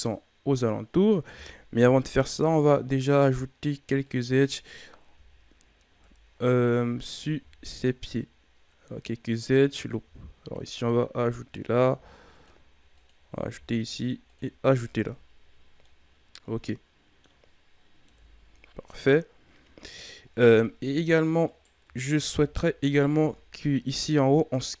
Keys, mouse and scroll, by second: 1.8 ctrl+r, 5.0 KP_Divide, 5.9 KP_1, 7.3 ctrl+r, 10.0 ctrl+r, 11.8 ctrl+r, 13.5 ctrl+r, 14.9 Tab, 15.8-18.0 middle drag, 18.0 KP_1, 20.0-21.1 ctrl+scroll up 7, 21.4 right click, 21.8 Tab, 22.6 alt+right click.